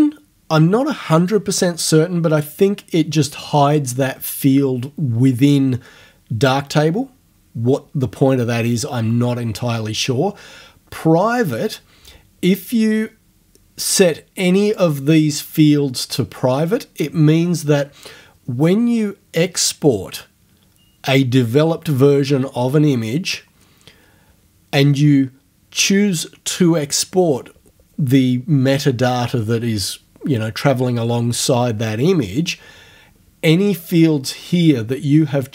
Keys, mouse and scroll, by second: 13.8 click, 14.7 click.